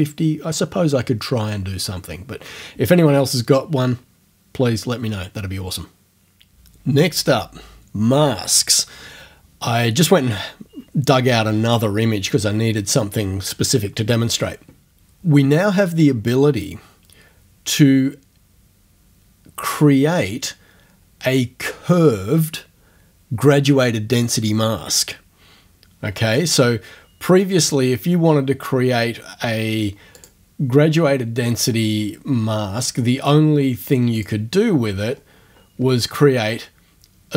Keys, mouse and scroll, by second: 30.2 click, 34.2 click, 35.1-36.4 scroll down 1.